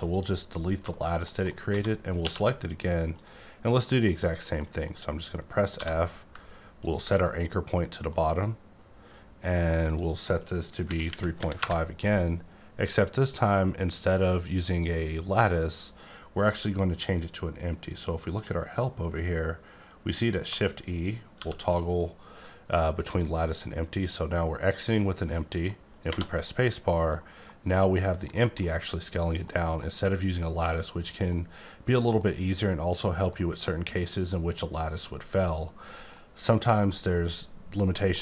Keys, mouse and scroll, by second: 0.4 click, 0.6-1.2 scroll down 4, 1.2 middle click, 1.6 a, 2.2 q, 3.2 click, 3.7 middle click, 4.6 middle click, 5.6 f, 6.8 ctrl+click, 7.2 middle click, 9.9 click, 10.7 KP_3, 11.1 KP_Decimal, 11.4 KP_5, 11.6 KP_Enter, 20.5 shift+Num_Lock, 21.4 shift+e, 25.4 middle click, 26.6-27.4 scroll up 4, 27.4 middle click, 28.3 middle click, 29.4 middle click, 30.5 click, 31.3 middle click, 33.3 middle click, 35.7 middle click, 36.0 scroll down 1, 36.5-36.8 scroll up 1, 36.8 middle click, 37.2 scroll up 2, 38.1 middle click.